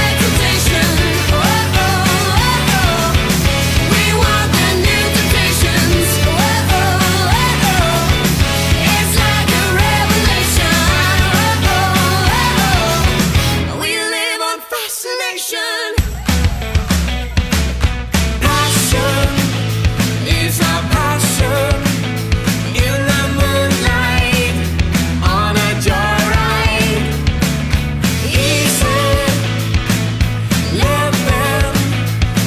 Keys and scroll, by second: 10.2 Return, 16.2 alt+shift+super+e, 21.7 super+i, 29.3 alt+shift+super+e.